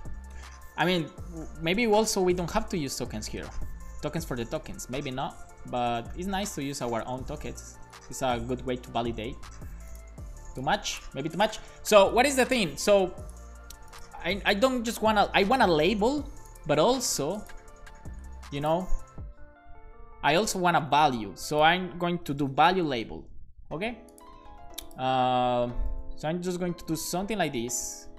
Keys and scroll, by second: 0.1 r, 1.1-4.0 typing, 5.4 alt+shift+Left, 5.7-8.3 typing, 22.0-23.2 typing, 25.7 shift+super+Left, 25.9 super+c, 26.2 Right, 26.8 super+Return, 27.1 super+v, 27.7 Up, 27.9 Up.